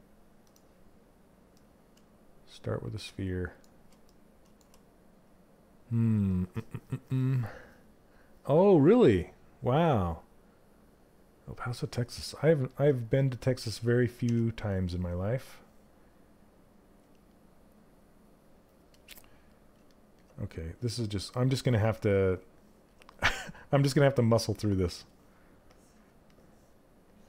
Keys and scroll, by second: 13.8 w.